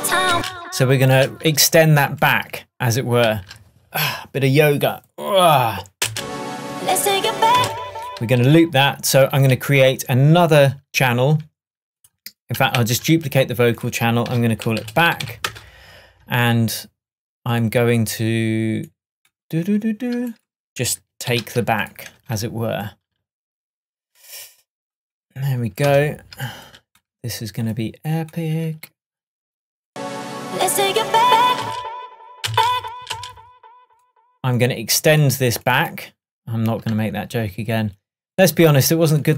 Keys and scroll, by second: 0.4 space, 6.2 space, 7.6 space, 25.9 BackSpace, 31.7 space.